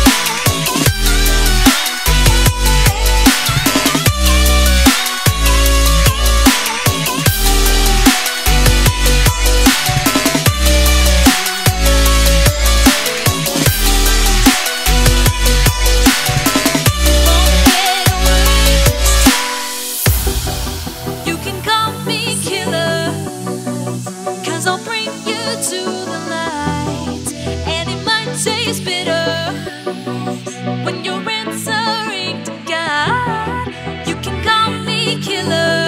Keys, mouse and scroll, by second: 0.9 click, 2.4 right click, 3.0 click, 3.6 z, 3.8 right click, 4.1 click, 6.1 Return, 6.3 click, 6.5 Delete, 6.7 click, 6.7 right click, 7.1 click, 8.1 Right, 10.7-13.2 scroll up 1, 13.2 click, 18.1 z, 19.3 click, 20.2 ctrl+c, 21.2 click, 22.0 ctrl+v, 23.8 t, 24.2 click, 27.1 Return, 28.4 click, 29.6 right click, 30.9 click, 31.9 ctrl+s, 33.3 click.